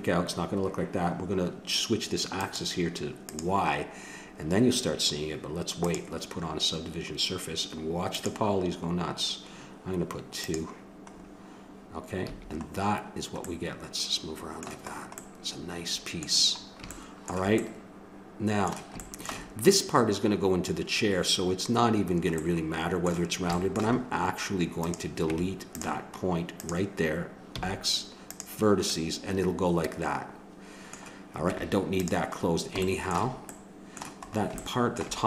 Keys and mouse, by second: 2.4-4.2 drag, 5.8-7.5 drag, 10.4 click, 11.1-12.3 middle drag, 12.3 a, 13.6-17.6 middle drag, 18.5-22.6 middle drag, 24.8-28.5 drag, 25.3 Tab, 27.5 x, 31.5 Tab, 32.9-35.2 middle drag.